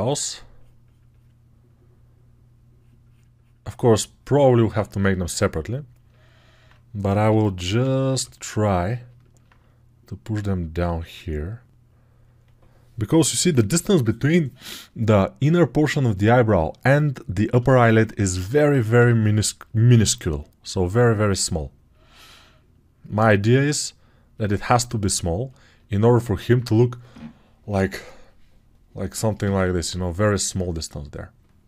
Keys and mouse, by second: 7.0 g, 7.5 ], 7.7 ], 18.8 g.